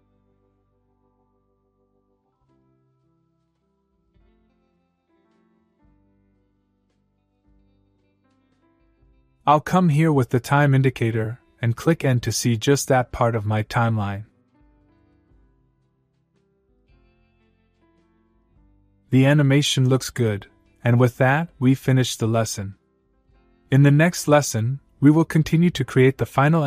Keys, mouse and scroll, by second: 3.1 space, 5.8 space, 8.9-11.7 click, 14.3 n, 16.6-17.4 click, 17.5 space.